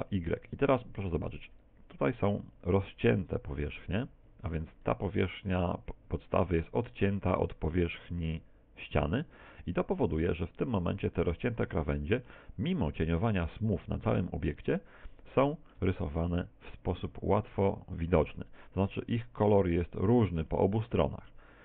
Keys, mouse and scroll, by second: 0.4 Escape, 1.7 right click, 3.5 g, 4.9 right click, 5.2 g, 7.1 right click, 7.9 right click, 8.1 g, 9.5 Tab, 10.3 middle click, 13.6 click, 15.4 shift+middle click, 16.1 middle click, 18.8-20.6 scroll up 6, 20.6 middle click.